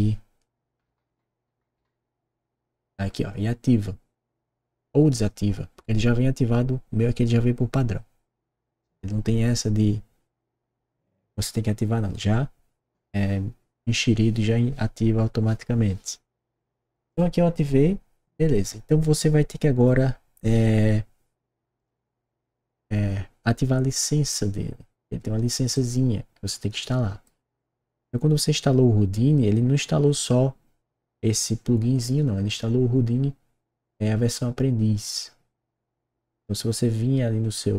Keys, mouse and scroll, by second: 0.3-1.3 typing, 17.0 click, 21.7 click, 25.7-27.2 right drag.